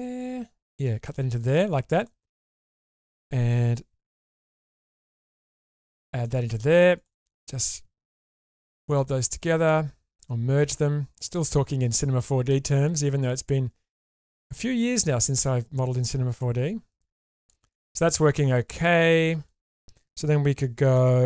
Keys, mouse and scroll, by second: 1.4 click, 1.8 scroll up 1, 2.1 shift+middle click, 2.5 scroll up 1, 3.1 click, 4.3 4, 5.5 click, 5.9 4, 6.2 middle click, 6.9 click, 7.3 shift+click, 8.3 m, 9.1 middle click, 9.6 click, 10.6 click, 11.9 click, 12.5 click, 13.4 click, 13.9 click, 15.2 click, 16.4 click, 17.3 click, 17.7 click, 18.1 scroll down 1, 18.4 middle click, 19.2 shift+middle click.